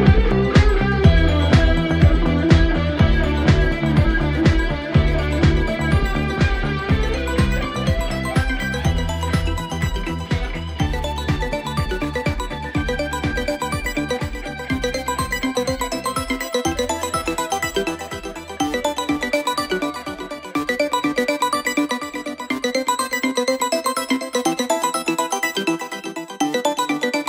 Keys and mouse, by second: 8.6 middle click, 8.8 middle click, 9.1 middle click, 9.5 middle click, 12.6 middle click, 18.7 middle click.